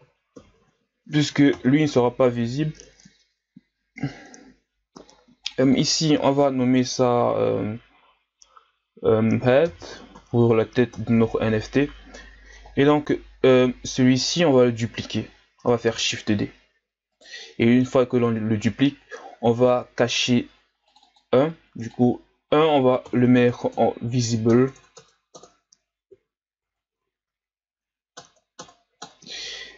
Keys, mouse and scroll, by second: 5.6-14.5 drag, 14.5-15.7 right drag, 15.7 shift+d, 20.9-24.6 drag, 24.6 BackSpace, 24.8 BackSpace, 26.2 Right, 26.6 Right, 27.0 Right, 27.1 Right, 27.5 Right, 28.3 BackSpace.